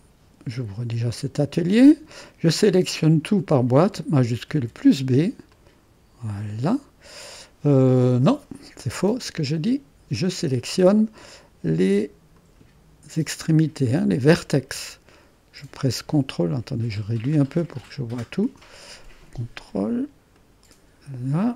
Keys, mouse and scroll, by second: 0.0-3.3 drag, 4.5 shift+b, 5.6-6.8 drag, 8.2 click, 8.9-9.9 scroll up 1, 9.9-11.1 drag, 11.1-12.4 scroll up 1, 12.4-13.7 drag, 13.9 middle click, 16.6-17.7 scroll down 1, 17.7-18.8 middle drag, 18.8-20.0 scroll down 1, 20.1-20.4 scroll down 1, 20.4 click.